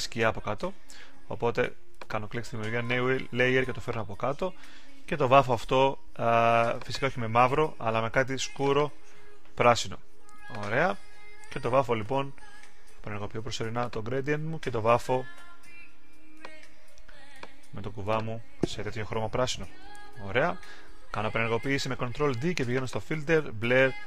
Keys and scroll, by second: 19.8 super+d.